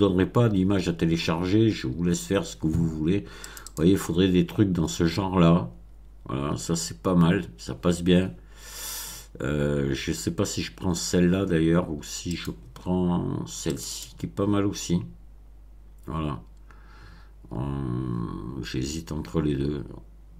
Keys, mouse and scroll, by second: 3.4 click, 12.2 click, 13.7 click.